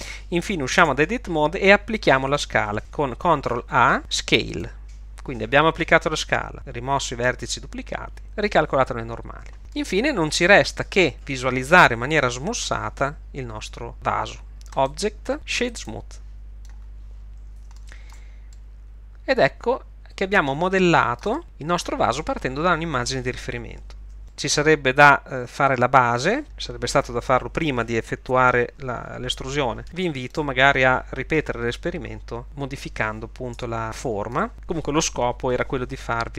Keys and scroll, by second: 0.9 Tab, 3.8 ctrl+a, 24.2 1, 33.6 Tab.